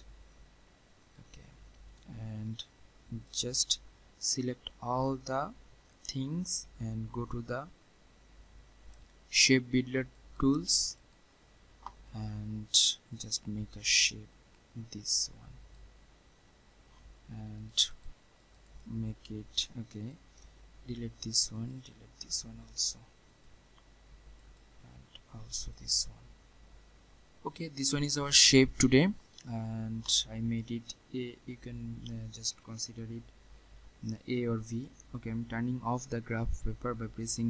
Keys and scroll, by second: 20.8 Delete, 36.1 ctrl+'.